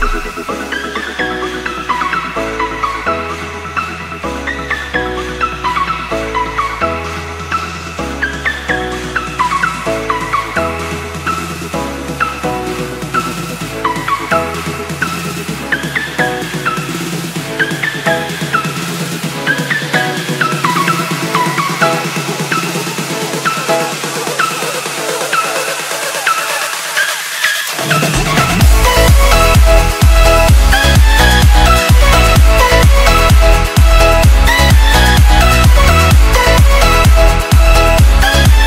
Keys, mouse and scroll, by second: 3.5 Right, 9.4 t, 10.3 shift+click, 12.3 Return, 15.3 click, 31.1 click.